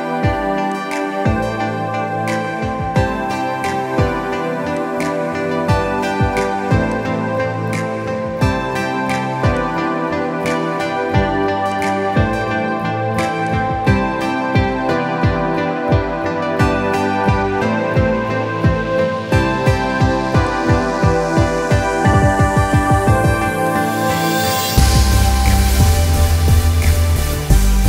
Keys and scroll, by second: 5.7 Delete.